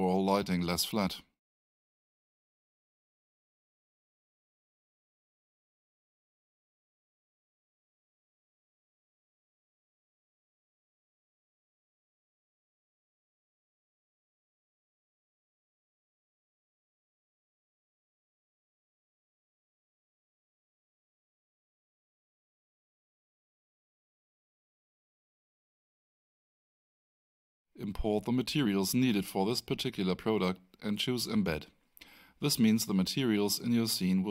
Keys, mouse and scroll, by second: 0.7 Return, 8.0 click, 10.8 2, 13.7 Return, 19.8 alt+right click, 21.3 alt+click, 22.5 alt+middle click, 24.6 click, 30.7 scroll down 1, 32.8 click, 33.4-34.0 scroll down 1.